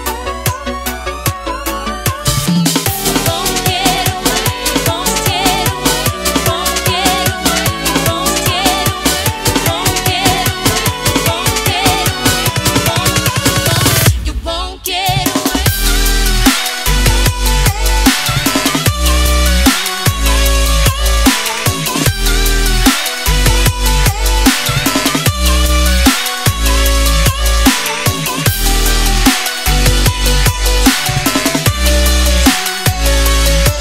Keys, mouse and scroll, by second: 7.8-9.1 scroll down 1, 9.1 alt+Tab, 9.5 alt+click, 9.6 scroll down 1, 9.9 click, 11.1 right click, 11.3 click, 11.5 Return, 12.5 click, 14.6 Delete, 15.3 click, 15.6 right click, 19.6 click, 21.0 t, 21.1 click, 23.5 Return, 24.4 click, 25.4-26.7 scroll up 1, 26.7 click, 29.0 ctrl+c, 29.1 click, 29.3 ctrl+v, 30.2 t, 30.4 ctrl+0, 30.8 click, 31.3 ctrl+0, 31.8 click.